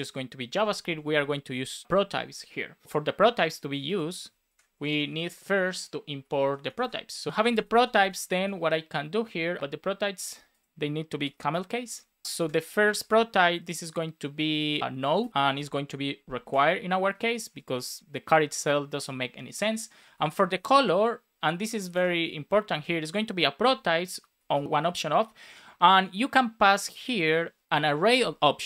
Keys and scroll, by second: 2.8 BackSpace, 4.4 super+Left, 4.7 Return, 5.0 Up, 6.8 space, 7.3 Down, 8.5 Down, 11.2 BackSpace, 11.4 shift+p, 11.8 super+s, 12.2 super+c, 12.3 space, 12.9 super+v, 16.4 Return, 17.0 BackSpace, 17.7 Return, 21.7 shift+;, 21.9 space, 22.6 super+v, 24.6 shift+9.